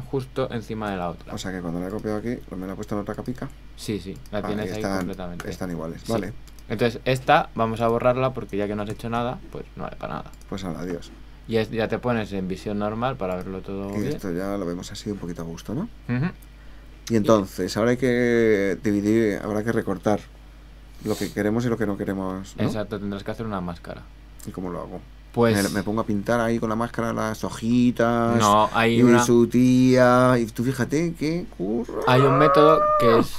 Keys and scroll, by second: 8.9 super+w, 32.2 super+space.